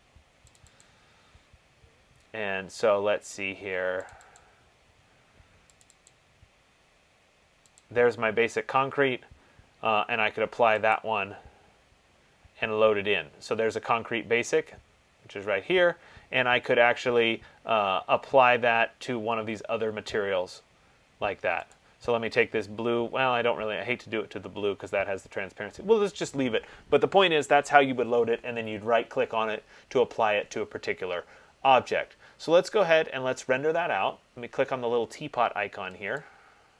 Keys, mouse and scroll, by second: 0.8 click, 1.0 click, 4.3 click, 4.6 click, 6.0 click, 6.3 click, 8.0 click, 11.1 click, 22.0 click, 36.5 click.